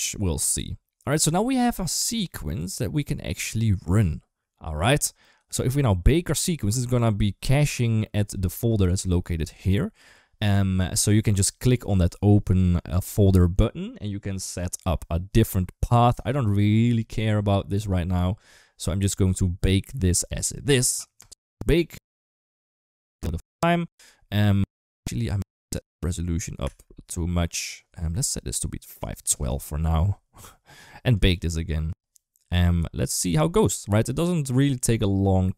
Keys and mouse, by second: 9.4 click, 21.0-27.1 drag, 28.9 click, 31.0-35.5 drag.